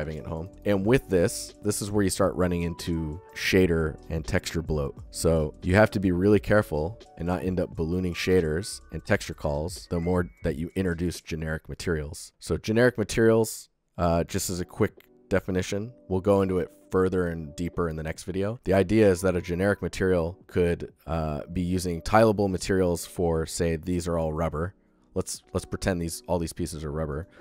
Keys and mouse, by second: 0.4 g, 24.7 g.